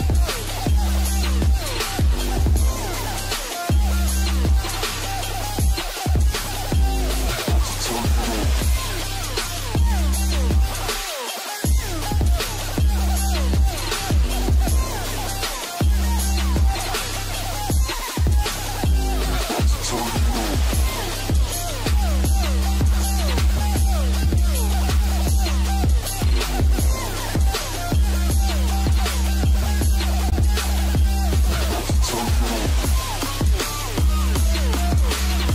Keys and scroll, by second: 12.6 ctrl+space, 25.1 ctrl+space, 26.1 ctrl+alt+space.